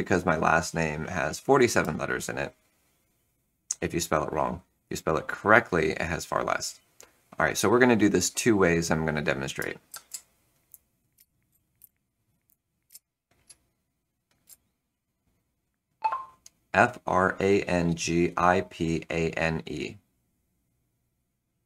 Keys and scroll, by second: 9.8-13.4 typing, 14.4 Return.